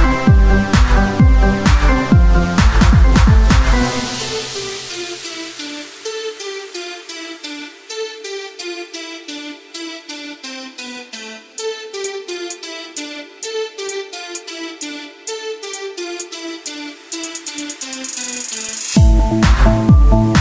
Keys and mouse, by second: 6.8 r, 8.5 ctrl+z, 9.2 click, 10.7 Tab, 14.5 ctrl+Tab, 14.5 KP_3, 18.8 r.